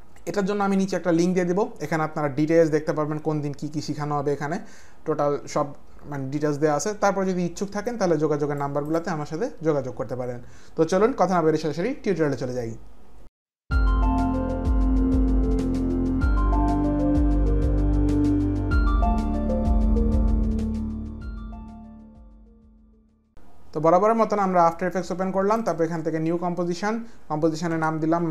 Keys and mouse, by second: 7.9 click, 25.6 click, 27.4-28.3 typing, 28.0 click.